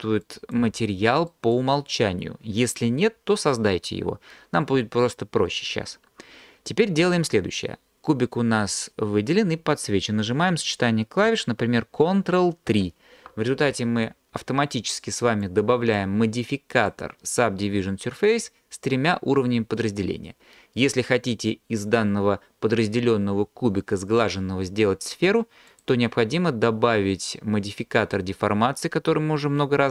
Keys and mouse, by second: 0.2 click, 12.7 ctrl+3, 16.8 click, 25.8-29.9 drag.